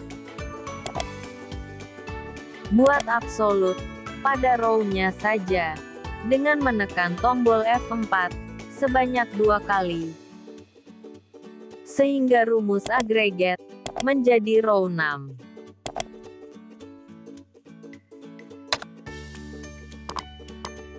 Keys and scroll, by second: 6.0 F4.